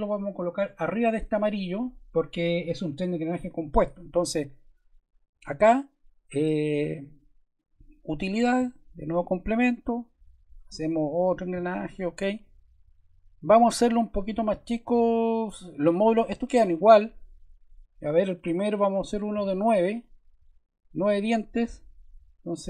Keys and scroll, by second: 19.3 9.